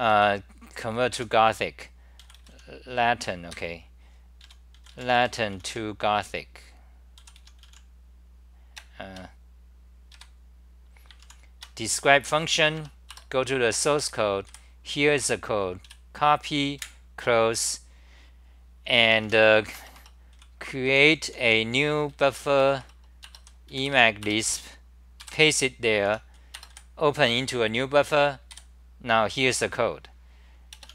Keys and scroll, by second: 0.0-0.6 typing, 3.5 ctrl+g, 4.6 a, 8.8 BackSpace, 9.0 BackSpace, 9.1 BackSpace, 12.7 Tab, 13.3 Return, 14.0 3, 14.5 1, 15.9 j, 16.8 super+w, 19.0 t, 19.5 Return, 20.3 c, 20.9-22.1 s, 22.1 d, 22.6 Return, 22.8 Return, 24.2 Return, 25.2 k, 26.1 End, 28.5 3.